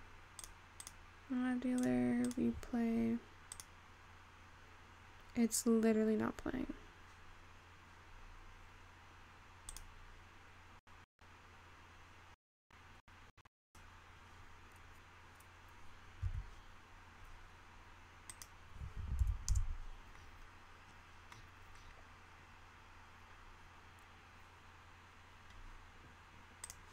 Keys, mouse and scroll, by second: 0.6-5.7 drag, 5.7-6.9 scroll down 3, 6.9-9.1 scroll up 7, 9.1-10.1 scroll down 4, 10.9 click, 15.0 click, 17.1 Escape, 18.6-20.3 drag, 20.3-21.6 scroll down 11, 21.6-22.1 scroll down 12, 22.4-25.3 scroll down 13.